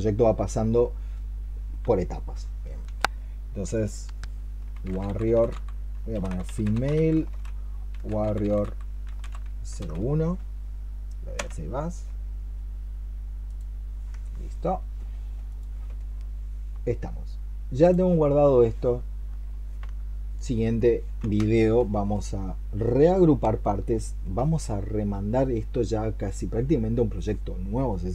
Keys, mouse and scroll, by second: 4.4-10.2 typing, 11.2 Return, 18.6 middle click.